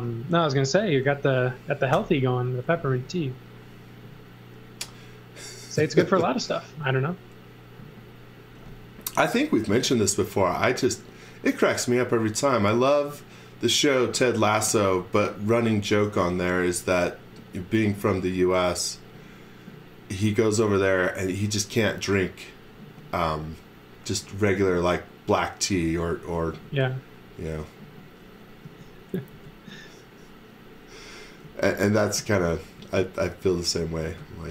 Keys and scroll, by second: 1.9 i, 9.8 e, 26.5 e, 28.6 a, 29.3 space, 31.4 e, 32.1 z, 32.7 x, 33.9 space.